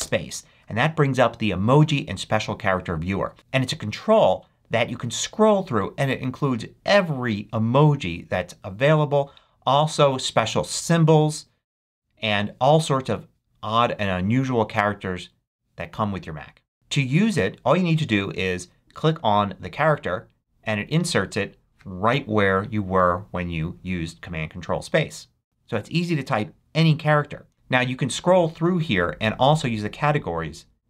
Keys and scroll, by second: 0.0 ctrl+super+space.